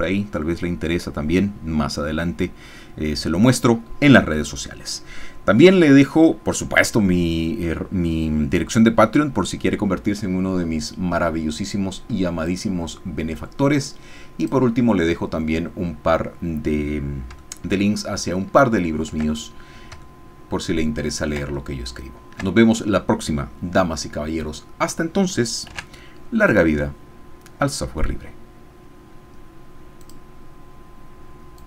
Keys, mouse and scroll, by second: 0.3-3.3 scroll up 1, 3.3-4.3 scroll up 1, 4.3-5.3 scroll up 1, 5.3-5.9 scroll up 1, 5.9-6.6 scroll up 1, 6.6-9.3 scroll up 1, 9.3-10.5 scroll up 1, 10.5-12.5 scroll up 1, 12.5 click, 14.5 click, 16.1-17.2 scroll down 1, 17.2 scroll down 1, 17.5 shift+middle click, 18.4 shift+middle click, 20.1-21.4 ctrl+middle drag, 21.7 ctrl+shift+middle click, 25.7 ctrl+s, 30.0 click, 31.6 click.